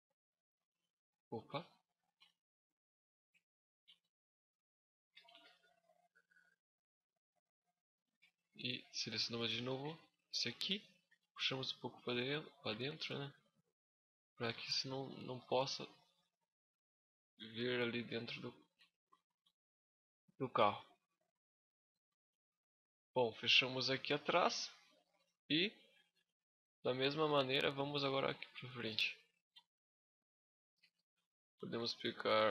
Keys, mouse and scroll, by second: 0.1 middle click, 1.0 click, 1.7 z, 2.0 middle click, 3.4 right click, 3.6 z, 4.2 click, 5.0 KP_Decimal, 5.6 scroll down 3, 5.9 middle click, 7.7 z, 8.1 middle click, 9.3 alt+right click, 10.9 click, 12.0 middle click, 12.5 z, 12.7 middle click, 14.9 KP_6, 15.4 KP_5, 16.1-17.1 scroll down 6, 16.5 middle click, 17.1 shift+scroll up 1, 17.2 shift+middle click, 18.1-18.8 scroll up 6, 18.2 middle click, 18.5 Tab, 19.2 middle click, 19.8 middle click, 21.2 Tab, 21.6 scroll down 5, 21.8 Tab, 22.1 middle click, 24.3-24.7 scroll down 6, 24.6 shift+scroll up 1, 24.7 shift+middle click, 25.2 scroll up 5, 25.5 middle click, 26.1 middle click, 26.5 shift+middle click, 27.0 middle click, 27.4 shift+middle click, 28.2 scroll up 1, 28.3 middle click, 29.3 Tab, 29.8 middle click, 30.3 scroll up 1, 30.9 shift+middle click, 32.4 right click.